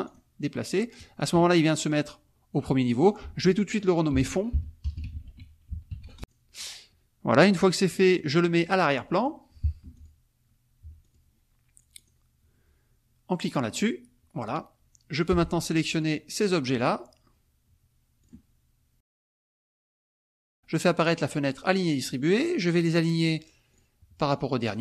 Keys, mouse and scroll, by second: 0.0 click, 2.9 click, 4.1-6.5 typing, 6.2 click, 8.1 click, 9.1 click, 9.8 F2, 9.9 click, 10.8 F1, 11.0 click, 12.0 click, 13.7 click, 15.2 click, 16.1 click, 18.2 click, 19.0 click, 19.5 shift+click, 19.8 shift+click, 21.7 click, 23.7 click, 24.6 click.